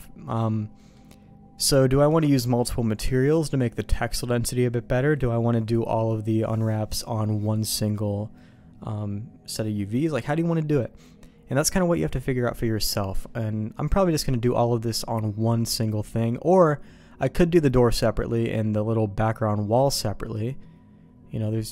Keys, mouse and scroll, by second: 0.7 middle click, 20.3-21.7 middle drag.